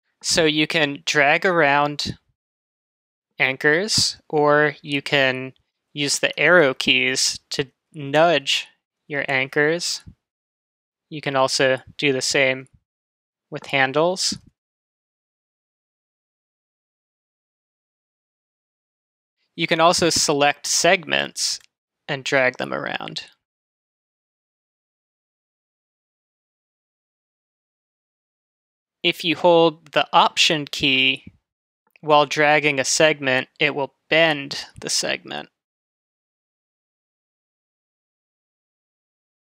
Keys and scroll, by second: 5.7 Left, 7.8 Up, 9.6 Right, 12.6 Left, 14.1 Right, 15.4 Up.